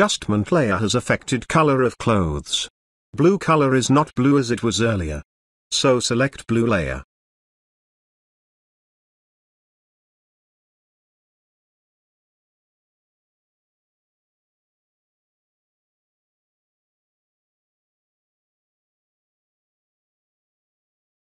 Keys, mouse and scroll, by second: 0.9-1.5 ctrl+drag, 13.8 click, 16.2 click.